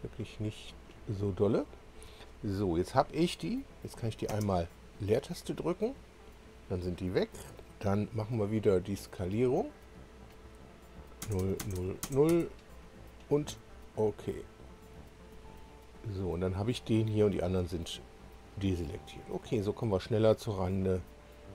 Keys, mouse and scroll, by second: 0.7 ctrl+click, 1.6 ctrl+click, 2.9 scroll down 1, 4.3 space, 9.7 click, 11.2 0, 11.6 Tab, 11.8 0, 12.0 Tab, 12.3 0, 12.8 Return, 14.6 click, 20.8 click.